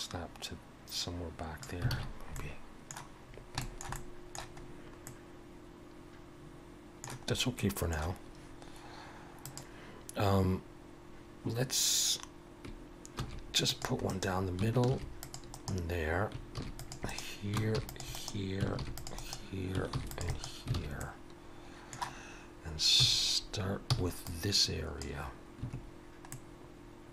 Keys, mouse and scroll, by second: 1.9 alt+a, 2.1-2.5 scroll down 2, 2.3 middle click, 3.3 scroll down 2, 3.6 shift+middle click, 3.9 middle click, 4.6-5.4 scroll up 2, 5.1 middle click, 7.3 scroll up 2, 7.6 middle click, 9.4 click, 13.2 ctrl+r, 14.9 ctrl+r, 17.8 ctrl+r, 18.9 ctrl+r, 20.8 alt+a, 21.0 middle click, 23.0 3, 23.9 c, 25.8 scroll down 2, 26.3 middle click.